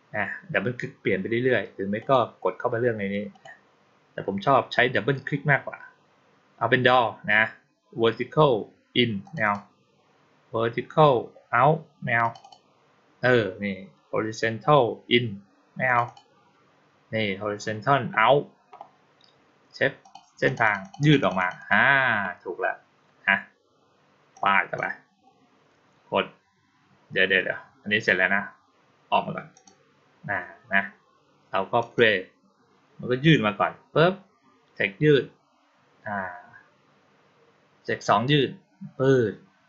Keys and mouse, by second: 1.8 click, 3.2 click, 9.1 click, 9.3 click, 12.1 click, 12.3 click, 15.7 click, 15.9 click, 19.9 click, 20.3 click, 20.5 click, 20.7 click, 20.9 click, 21.1 click, 21.2 click, 21.4 click, 24.2-24.6 drag, 29.4 click, 31.7 click.